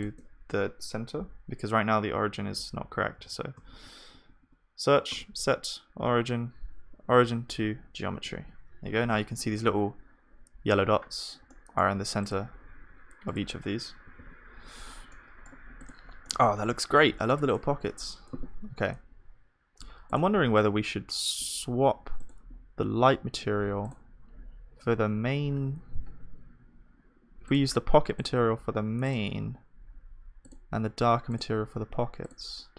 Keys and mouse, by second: 0.0-3.7 drag, 1.2 F3, 3.7 BackSpace, 4.4 BackSpace, 8.3 ctrl+s, 9.3-14.2 middle drag, 12.7 shift+w, 14.2 ctrl+s, 14.5-16.1 middle drag, 16.6 KP_1, 22.3-32.7 drag.